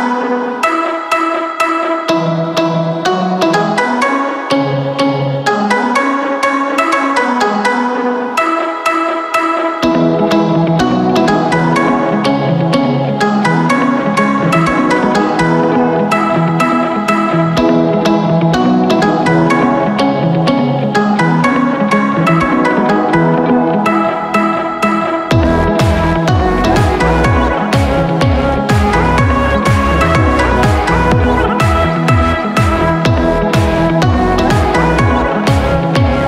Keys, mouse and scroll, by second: 9.7 ctrl+i, 27.7 ctrl+j.